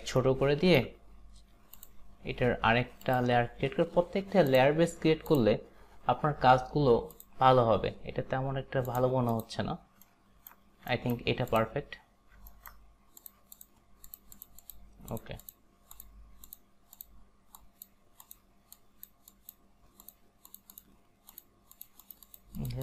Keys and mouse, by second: 0.2 alt+right click, 3.1 click, 4.5 click, 8.9 click, 10.1 alt+right click, 11.5 click, 11.9 click, 12.6 alt+right click, 13.3 click, 13.6 click, 14.4 click, 14.7 click, 15.2 click, 15.5 click, 17.0 click, 17.6 click, 18.3 click, 18.9 click, 19.4 click, 20.1 click, 20.5 click, 21.8 click, 22.1 click.